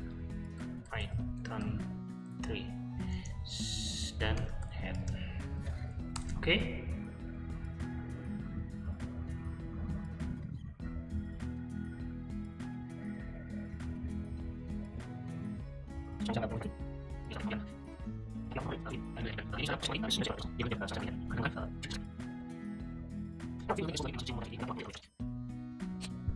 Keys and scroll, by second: 0.1-5.5 typing, 6.2 Return.